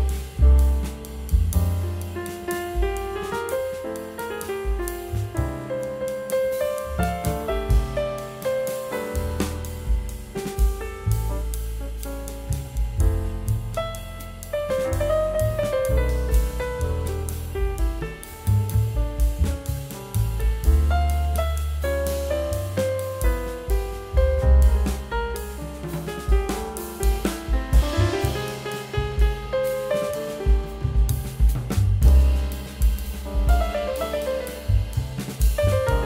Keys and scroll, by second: 3.7 [, 6.7 ctrl+z, 10.8 x, 18.0 [, 26.1 ], 30.3 [.